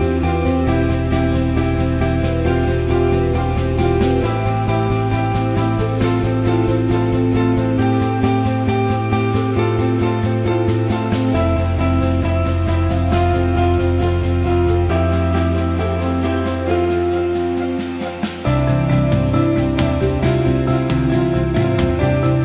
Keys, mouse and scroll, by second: 2.5 click, 2.7-6.9 drag, 8.6 Tab, 10.0 click, 19.7 ctrl+KP_Add.